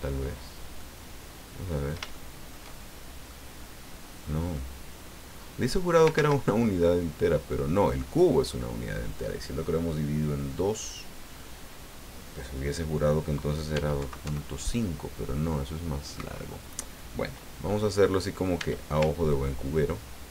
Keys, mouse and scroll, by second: 0.8-2.1 drag, 3.1 click, 3.5 click, 4.5-6.1 drag, 6.1 ctrl+z, 6.8-8.1 drag, 13.7 e, 14.0 KP_Decimal, 14.2 KP_5, 16.1 Escape, 18.5 e, 19.3-20.3 ctrl+drag.